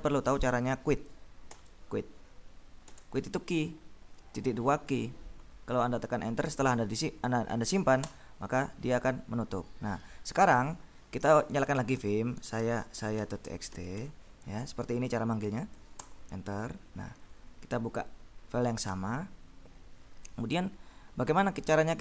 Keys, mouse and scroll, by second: 1.6 shift+;, 2.9 q, 8.2 Return, 11.3-14.6 typing, 16.1 Return, 17.3 Down, 19.0 End.